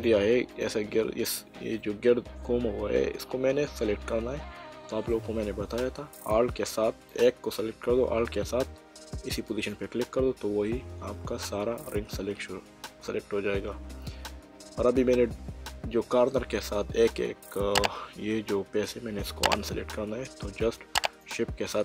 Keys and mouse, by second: 1.8 middle click, 7.1 click, 9.5 alt+click, 11.5 middle click, 15.1 middle click, 21.0 shift+click.